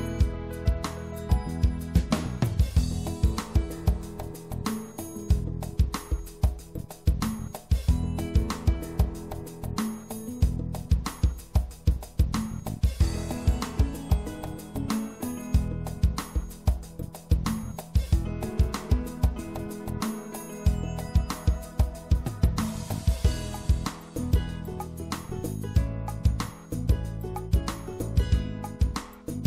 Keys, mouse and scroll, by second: 0.6 ctrl+z, 1.2-3.1 middle drag, 5.9 middle click, 6.9-8.9 right drag, 8.1-9.9 drag, 10.6-14.7 middle drag, 14.7-18.6 drag, 15.4-16.5 right drag, 16.5 right click, 18.6-21.6 middle drag, 21.6 click, 22.5-24.3 right drag, 24.3 e, 25.6 middle click, 26.3-28.1 drag.